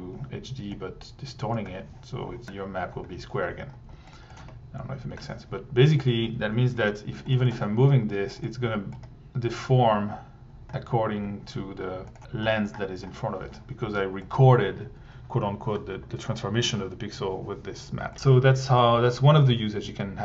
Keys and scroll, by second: 2.4 1, 6.8 t, 14.5 1.